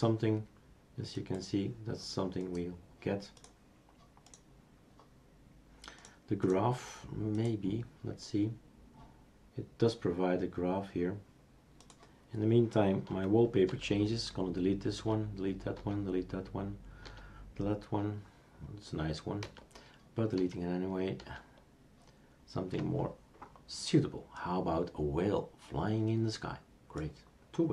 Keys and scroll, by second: 13.7 alt+t, 15.0 alt+t, 15.8 alt+t, 17.1 alt+t, 19.4 alt+t, 20.4 alt+t, 21.2 alt+t.